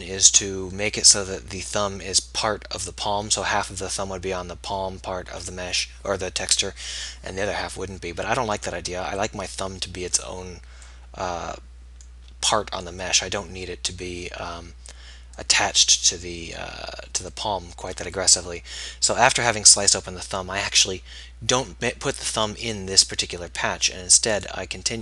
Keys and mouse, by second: 24.4-25.0 middle drag.